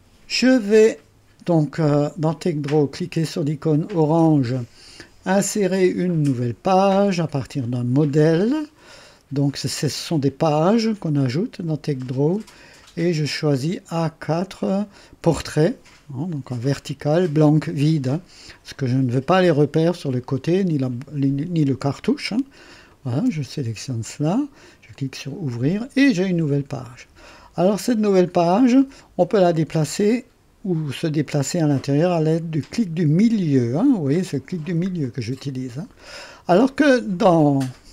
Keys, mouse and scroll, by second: 7.3 click, 9.4-10.6 drag, 11.0-14.1 drag, 22.8 click, 24.9 click, 27.5 scroll down 1, 29.8-31.0 middle drag, 31.0 scroll up 1, 31.1-34.3 middle drag, 35.0-36.0 middle drag, 35.0 scroll up 2, 36.8 click.